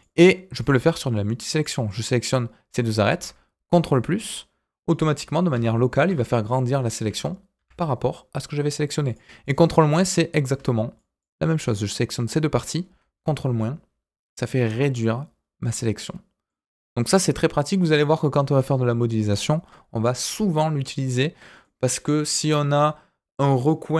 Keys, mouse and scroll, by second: 0.2 middle click, 1.5 shift+click, 1.8-2.9 middle drag, 4.9 ctrl+KP_Add, 5.5 ctrl+KP_Add, 7.0 ctrl+KP_Subtract, 7.5 ctrl+KP_Subtract, 9.0 click, 9.4 click, 9.9 middle click, 10.9 shift+click, 11.6-12.7 middle drag, 13.4 ctrl+KP_Subtract, 14.7-16.4 middle drag, 16.7 click, 21.6 middle click.